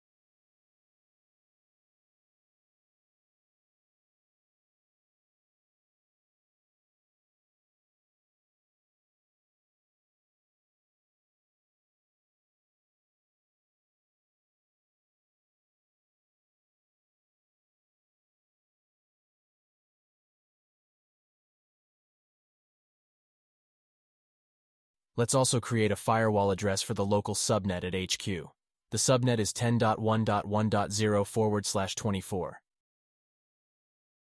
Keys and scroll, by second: 3.7 alt+q, 5.4 alt+q, 7.0 alt+q, 24.9 alt+q, 30.9 alt+q, 34.3 alt+q.